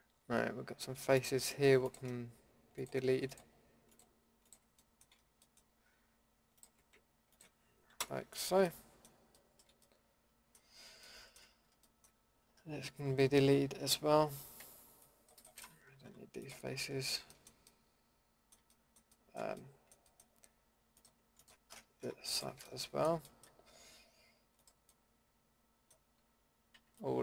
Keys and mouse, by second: 4.8 middle click, 7.9 Delete, 8.7 middle click, 14.6 c, 16.0 Delete, 16.7-17.3 drag, 18.8 middle drag, 19.2 middle click, 19.9-21.0 middle drag, 21.0-23.2 drag, 22.0 Delete, 25.6 middle drag, 26.7 c.